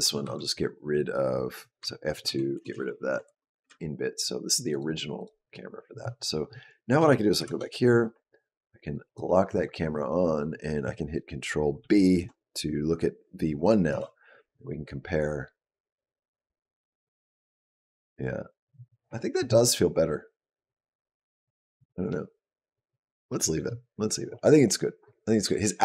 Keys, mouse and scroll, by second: 0.1 Right, 1.6 F2, 2.5 BackSpace, 2.7 BackSpace, 4.5 click, 5.0 click, 5.2 click, 7.2 shift+Down, 8.9 click, 11.6 ctrl+b, 13.7 space.